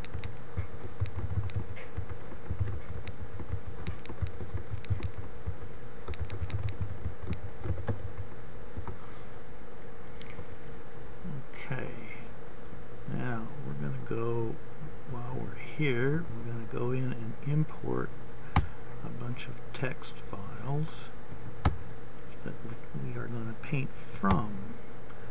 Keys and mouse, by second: 1.7 t, 21.6 click, 21.8 middle click.